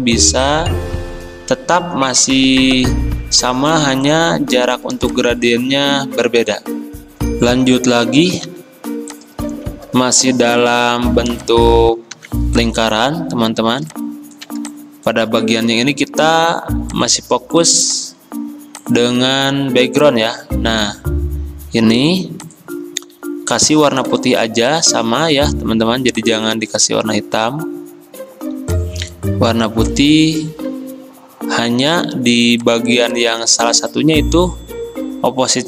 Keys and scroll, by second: 7.0 F9, 8.5 l, 12.2 v.